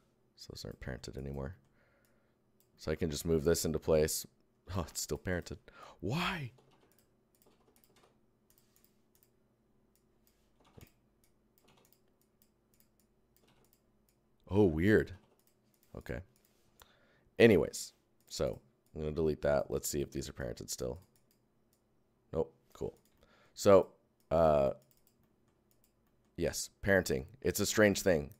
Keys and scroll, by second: 3.2 Tab, 4.7 ctrl+Tab, 4.8 ctrl+z, 5.2 Tab, 6.6 ctrl+Tab, 6.6 ctrl+z, 7.3 Tab, 7.4 ctrl+c, 7.7 Tab, 7.9 ctrl+v, 8.4 Tab, 10.5 ctrl+Tab, 10.6 ctrl+z, 11.1 Tab, 11.6 ctrl+z, 11.8 Tab, 12.1 Tab, 13.3 ctrl+Tab, 13.4 ctrl+z, 14.0 Tab, 15.0 ctrl+Tab, 15.1 ctrl+z, 15.7 Tab, 18.4 Tab, 18.8 Tab, 23.5 Tab, 27.9 Tab.